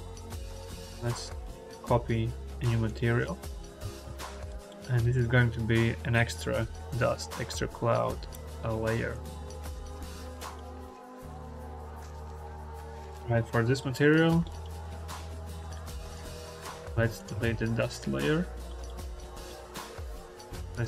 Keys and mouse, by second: 2.7 middle click, 4.6 middle click, 10.3 middle click, 13.6 middle click, 14.4 middle click, 15.2-16.1 drag, 16.3 click, 16.7 x, 17.0 click, 17.2 x, 17.9-18.2 drag, 18.2 x, 18.7 click, 20.1 drag, 20.5-20.8 drag.